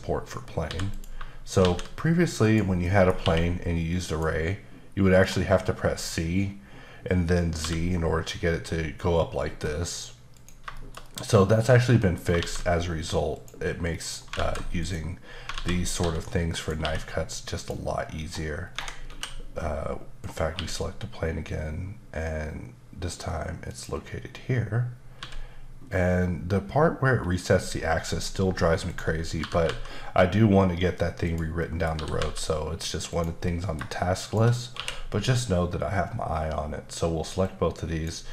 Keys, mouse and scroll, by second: 0.9 click, 1.6 shift+a, 2.4 click, 2.8 middle click, 3.1 scroll up 1, 3.2 q, 4.1 click, 5.7-6.8 scroll up 4, 7.6 z, 8.6-10.3 scroll up 4, 10.3 click, 10.7 shift+middle click, 12.4 shift+a, 13.9 middle click, 14.3 alt+z, 14.8 click, 15.8 scroll down 1, 16.0 s, 16.6 click, 16.8 q, 17.6 click, 18.0-18.6 scroll up 2, 18.6 scroll down 1, 18.7 Escape, 19.1 a, 20.2 click, 20.5 q, 23.7 click, 25.2 z, 25.8-27.5 scroll up 5, 27.5-28.1 scroll up 4, 28.5-28.8 scroll up 2, 28.8 click, 29.4 typing, 31.3 click, 31.6 middle click, 31.9 typing, 33.1 click, 33.5 middle click, 34.2 shift+click, 34.7 q, 37.4 click.